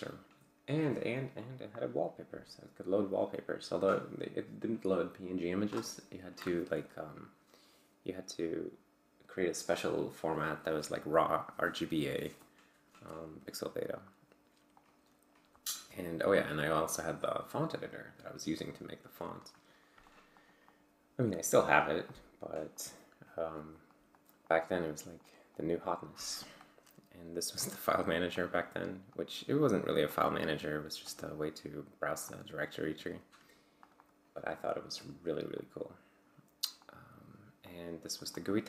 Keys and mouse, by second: 0.7-3.6 drag, 3.8 click, 14.0 click, 14.8 click, 16.4-18.0 drag, 20.1 click, 20.4 click, 20.8 click, 21.7 click, 22.1 click, 22.4 click, 22.8 click, 23.8 click, 24.1 click, 24.5 click, 24.8 click, 25.2 click, 25.6 click, 26.4 click, 27.6 click, 28.4 click, 29.1 click, 29.6 click, 30.1 click, 31.1 click, 31.4 click, 32.3 click, 33.8 click, 34.7-35.1 drag, 35.6 click, 36.8 click, 37.7-38.6 drag.